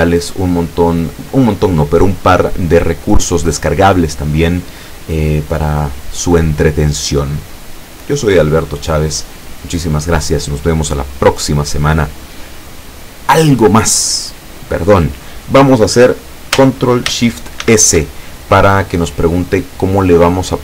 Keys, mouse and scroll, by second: 17.7 ctrl+shift+s.